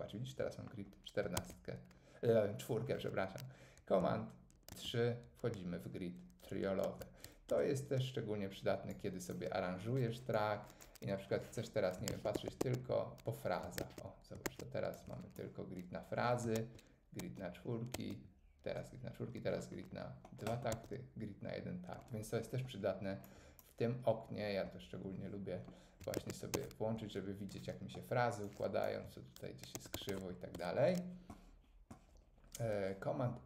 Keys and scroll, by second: 1.4 super+1, 4.7 super+3, 7.5 Tab, 12.1 super+2, 13.8 super+2, 14.4 super+2, 16.5 super+1, 17.2 super+1, 17.9 super+1, 20.7 super+1, 26.2 super+2, 29.7 super+1, 30.5 Tab.